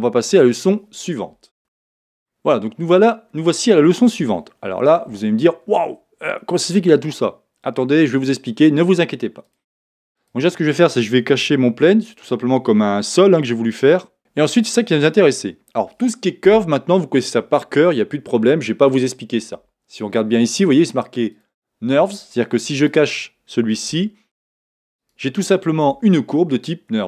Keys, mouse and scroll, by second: 1.7-9.5 middle drag, 2.3-3.6 scroll up 2, 3.6-4.4 scroll down 2, 9.5 click, 10.2 click, 11.8 h, 12.2-12.7 scroll down 2, 12.7-18.0 middle drag, 14.1 scroll, 14.2 click, 21.4-22.9 drag, 23.9 h, 25.0 click, 26.0 Tab, 26.6-27.0 middle drag.